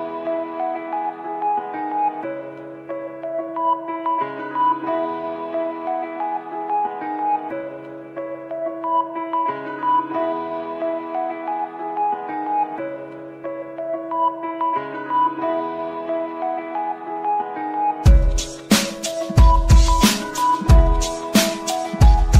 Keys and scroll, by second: 17.6 F3, 21.0 shift+F2, 21.3 Escape.